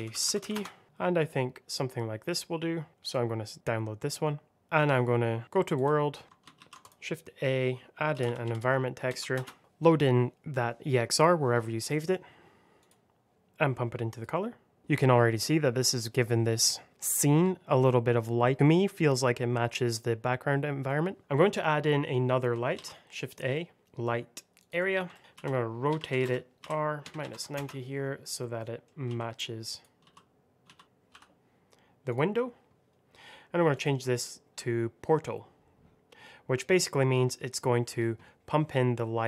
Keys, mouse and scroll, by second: 0.0 i, 0.2 t, 0.3 y, 0.4 Return, 2.9 click, 4.5 middle click, 4.7 click, 6.1 scroll down 1, 6.5 shift+a, 6.7 click, 8.0 e, 8.2 n, 8.3 c, 9.0 BackSpace, 9.2 Return, 11.7 click, 16.9-18.1 scroll down 1, 21.2-21.8 scroll down 1, 21.8-22.4 scroll up 1, 22.7 shift+a, 24.5 click, 25.0 alt+middle click, 25.2-27.2 typing, 25.8 KP_Subtract, 26.9 KP_Subtract, 27.4 Return, 28.3 middle click, 29.0-31.0 typing, 29.6 click, 32.0 click, 38.4 middle click.